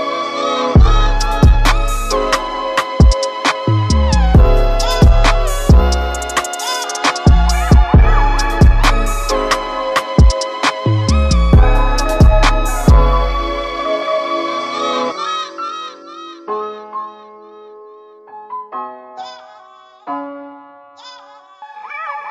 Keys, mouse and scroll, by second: 7.6-9.3 drag, 9.3-13.6 right drag, 13.6-16.3 drag, 16.3 scroll down 3, 16.5 KP_1, 16.8-17.2 scroll up 7, 17.7-18.8 shift+middle drag, 18.8-22.3 drag.